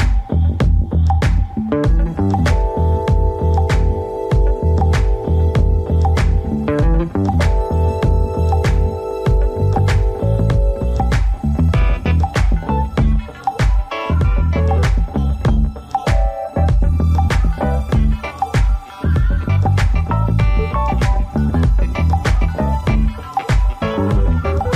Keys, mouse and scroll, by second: 4.1 click, 5.9 click, 7.0 click, 8.6 click, 10.0 click, 11.9 click, 18.2 click, 20.8 click, 22.1 click, 23.4 click.